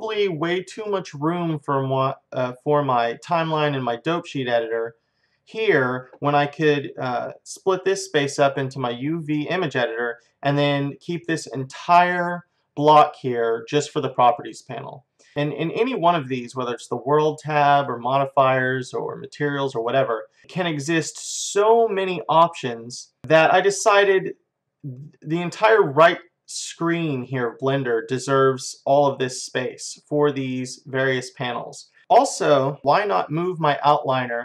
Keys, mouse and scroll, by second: 14.1-17.3 drag, 17.8-28.4 drag, 23.2-28.4 middle drag, 28.6-32.0 drag.